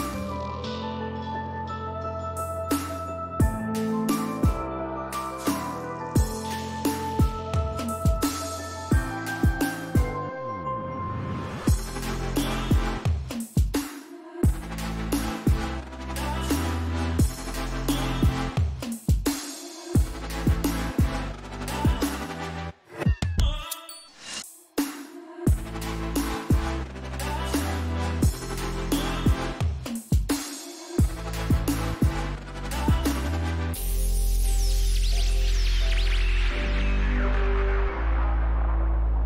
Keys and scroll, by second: 3.9 m, 5.9 o, 6.5 e, 6.8 l, 34.5 5, 34.8 Return.